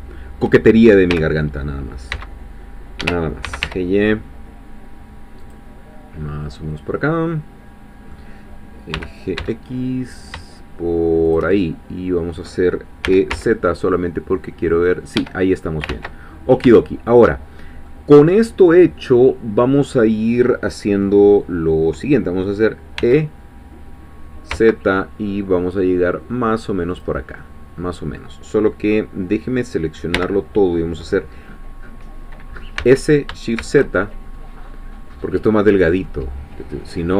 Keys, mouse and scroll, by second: 1.1 g, 2.1 x, 3.0 Escape, 3.4 g, 3.6 y, 5.4-6.4 drag, 6.4-8.9 middle drag, 8.9 g, 9.4 x, 11.3 shift+click, 11.5-12.6 shift+middle drag, 13.0 e, 13.3 z, 15.2 Escape, 15.9 ctrl+z, 16.3-16.7 ctrl+scroll up 1, 16.8-23.0 shift+middle drag, 23.0 e, 24.5 z, 26.9 click, 27.4-30.1 middle drag, 30.1 l, 32.8 s, 33.6 shift+z.